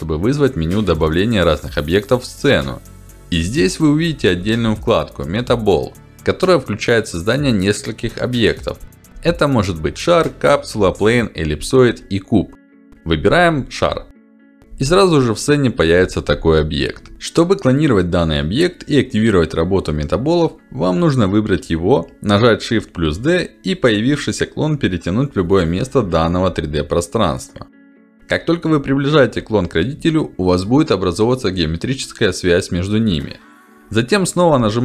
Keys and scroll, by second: 6.7 ctrl+alt+d, 22.8 shift+d.